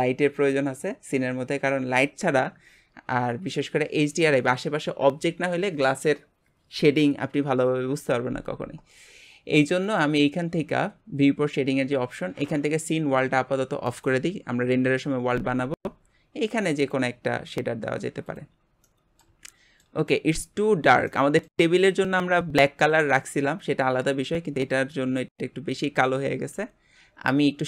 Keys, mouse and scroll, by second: 18.8-20.7 middle drag, 20.7-21.1 scroll up 2, 21.1-26.2 middle drag.